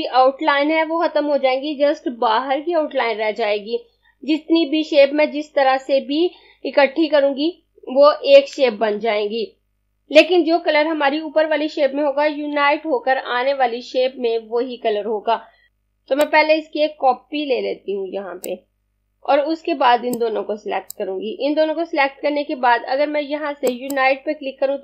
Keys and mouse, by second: 15.7 z, 16.3 click, 20.1 click, 23.7 click.